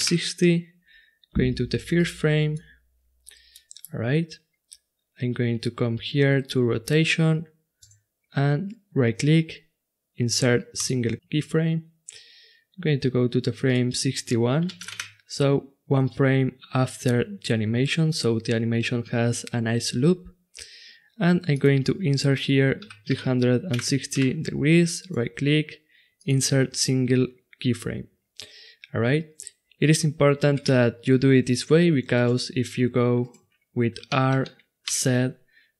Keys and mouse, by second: 3.5-7.8 middle drag, 7.8-9.6 right drag, 13.6-23.4 drag, 24.9 click, 26.5 right click, 32.2-34.1 right drag, 34.1 click, 34.1 r, 34.8 right click.